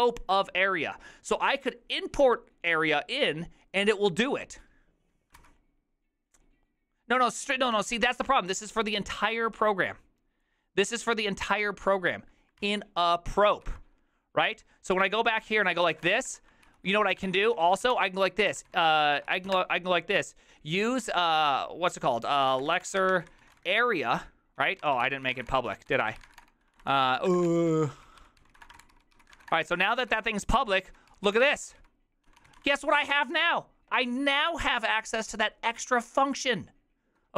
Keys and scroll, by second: 5.4 ctrl+c, 7.9 alt++, 12.7 alt+{, 13.7 ctrl+c, 14.5 ctrl+^, 15.0 ctrl+c, 15.1-20.0 typing, 16.7 ctrl+c, 17.2 ctrl+^, 22.2-33.1 typing, 30.0 ctrl+c.